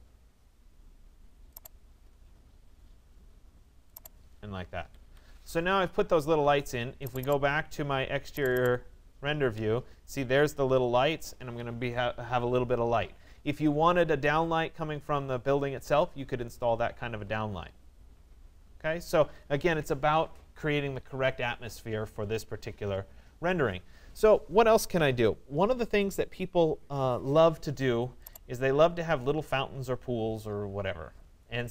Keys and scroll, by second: 4.3 Escape.